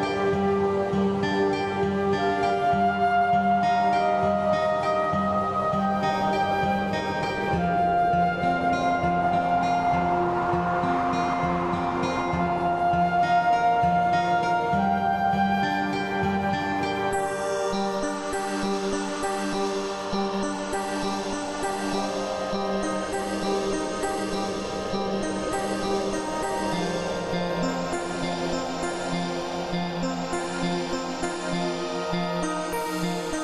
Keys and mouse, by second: 0.8 click, 2.4 click, 3.4 click, 4.4 KP_Add, 7.8 x, 8.5 click, 12.3 click, 14.6 click, 15.1 click, 15.6 click, 17.0 click, 17.6 click, 20.7 click, 21.9 click, 23.2 click, 24.1 click, 25.3 click, 27.0 click, 28.9 click, 30.8 click.